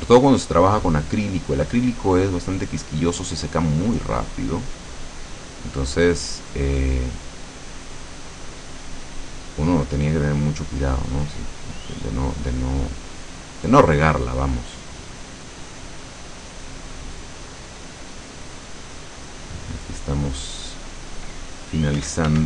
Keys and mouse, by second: 11.5-20.6 drag, 22.0 f.